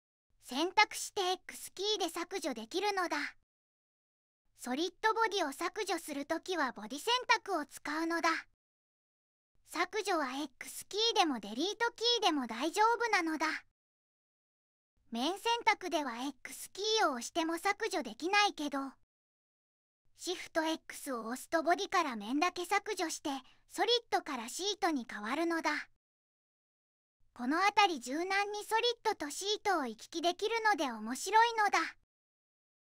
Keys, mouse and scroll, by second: 2.2 x, 4.5 x, 13.7 x, 18.0 x, 21.3 x, 24.0 x.